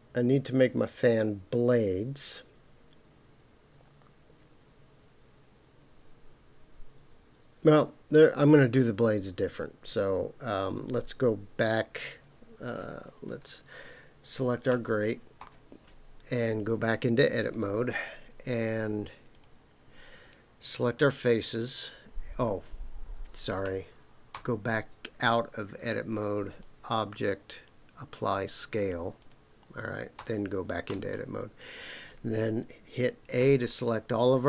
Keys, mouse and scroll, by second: 13.1 Tab, 14.3 click, 15.4 Tab, 19.3 click, 24.3 Tab, 26.5-29.3 drag, 30.1 Tab, 33.4 a.